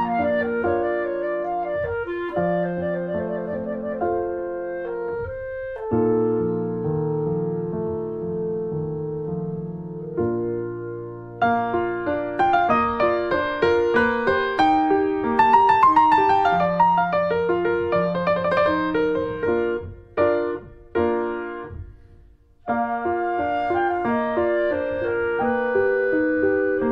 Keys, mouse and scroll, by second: 0.4 click, 0.5-2.4 middle drag, 2.4 ctrl+s, 2.7 middle click, 3.6 click, 3.7 middle click, 4.6 Tab, 4.7 click, 5.2 alt+middle click, 5.5 scroll down 1, 5.7 alt+middle click, 6.3 scroll up 1, 6.6 shift+middle click, 7.0 r, 10.3 click, 10.5 scroll down 2, 10.6 middle click, 11.1 scroll down 1, 11.3 middle click, 11.5-12.1 scroll up 3, 11.8 shift+middle click, 12.1 middle click, 12.5 ctrl+s, 12.7 shift+middle click, 13.4 click, 13.6 shift+middle click, 14.4 click, 14.4 middle click, 14.8 click, 15.1 click, 15.2 scroll up 1, 15.4 middle click, 16.0 scroll up 1, 16.2 click, 16.4 scroll down 1, 16.6 middle click, 16.8 scroll up 1, 17.0-18.1 middle drag, 18.2 scroll down 2, 18.4 click, 18.6 middle click, 18.7-19.1 scroll up 2, 18.8 middle click, 19.1 middle click, 19.6 click, 19.7 middle click, 20.2 middle click, 20.6 click, 20.7 middle click, 20.9 click, 21.4 middle click, 22.2 scroll down 1, 22.3 shift+middle click, 22.9 shift+middle click, 23.5 shift+a, 25.4 middle click, 25.6 scroll up 1, 25.7 shift+middle click, 25.8 s.